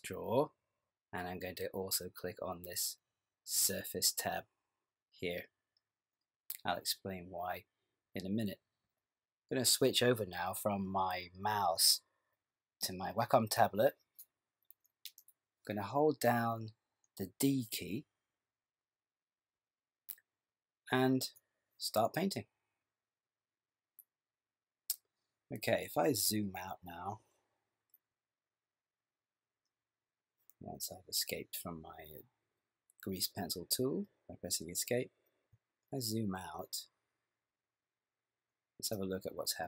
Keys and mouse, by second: 3.6 click, 19.6-20.8 d, 20.9 click, 24.4 click, 35.8 ctrl+middle click.